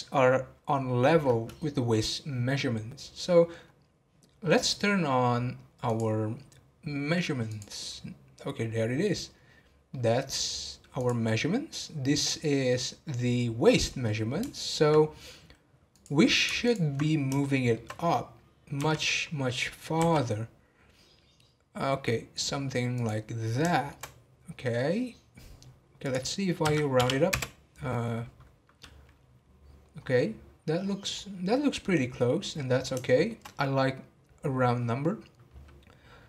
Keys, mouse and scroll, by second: 9.9-10.6 middle drag, 10.6-11.0 scroll up 1, 11.0-14.0 drag, 14.0-15.4 middle drag, 15.4 scroll down 1, 15.9-17.4 drag, 17.4-18.4 shift+middle drag, 18.4-18.7 scroll up 1, 18.7 g, 23.3 scroll up 2, 23.7-24.1 shift+middle drag, 24.1-24.7 scroll up 5, 26.9-30.0 drag, 30.0-30.5 scroll down 10, 30.8-31.2 scroll up 10, 31.8 scroll down 3, 32.4-33.0 scroll down 5, 33.0-35.1 shift+middle drag, 35.1 scroll down 3.